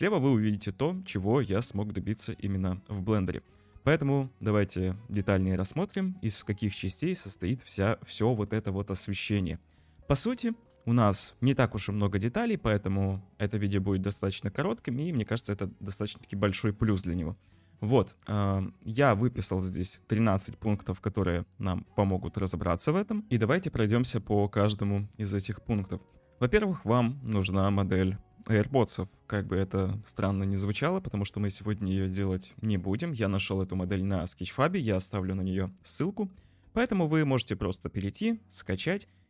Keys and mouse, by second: 11.0-11.5 shift+middle drag, 12.5-13.0 middle drag, 13.5 shift+middle click, 19.7-21.2 drag, 23.3 ctrl+shift+F1, 26.5-27.5 middle drag, 28.3-29.5 middle drag, 30.6-31.6 shift+middle drag, 33.9 middle click.